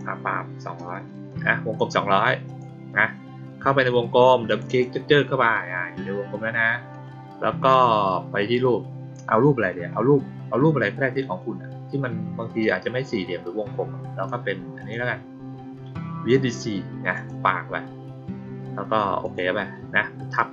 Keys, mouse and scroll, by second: 2.4 click, 4.4 click, 4.6 click, 8.3 click, 12.5-14.2 drag, 14.7 click, 17.1 click, 19.1 click.